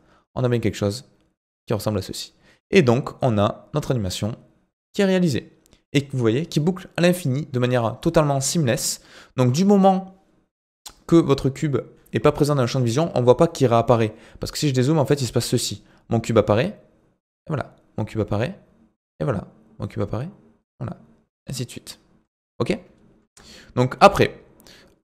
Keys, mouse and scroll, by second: 14.3-16.3 scroll down 7, 22.2 space, 22.6-23.2 scroll up 2, 23.2 space.